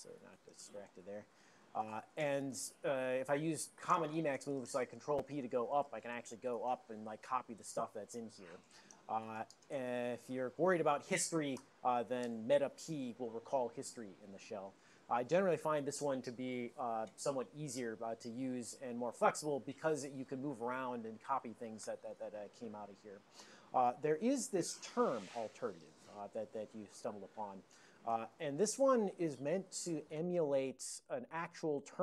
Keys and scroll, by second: 0.2 alt+o, 0.8 ctrl+g, 0.9 ctrl+g, 5.5 ctrl+p, 5.9 ctrl+p, 6.1 ctrl+p, 6.9 ctrl+a, 7.2 ctrl+space.